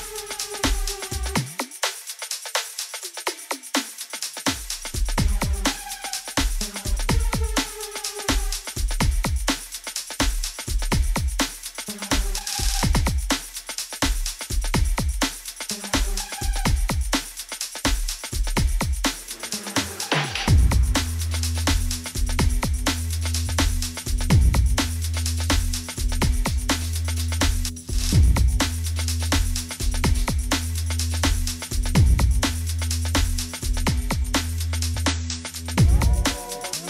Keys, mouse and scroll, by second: 0.9-1.3 typing, 2.0 click, 2.4 click, 3.5 8, 4.5 Return, 6.5 click, 7.7 click, 8.3 click, 10.2 click, 11.1-12.8 scroll, 12.8 click, 12.8-14.2 scroll, 17.3 click, 20.0 click, 20.8 click, 24.9 click, 26.5 click, 31.0 alt+g, 36.1 click.